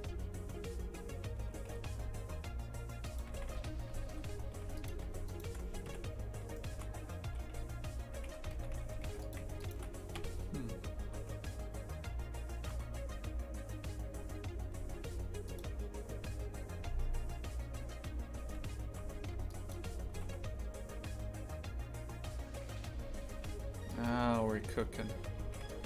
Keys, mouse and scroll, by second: 3.3 shift+f, 5.3 shift+right click, 5.9 KP_3, 6.6 shift+middle click, 7.3 g, 8.6 shift+f, 9.6 shift+right click, 10.2 KP_3, 11.1 g, 19.2 z, 19.7 shift+click, 20.2 g.